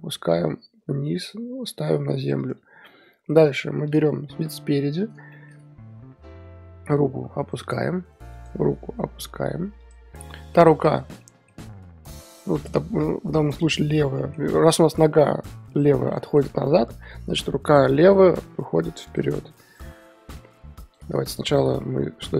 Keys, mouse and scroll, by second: 2.8-3.9 middle drag, 3.9 click, 4.3 KP_1, 5.3-6.7 shift+middle drag, 6.7 r, 8.5 click, 8.7 r, 10.2-10.8 middle drag, 10.8 KP_3, 11.2-12.5 middle drag, 12.6 click, 13.0-16.5 middle drag, 16.5 KP_3, 17.7 r, 19.8 click, 20.4 r, 21.3 ctrl+z, 21.5 ctrl+z, 22.1 ctrl+z.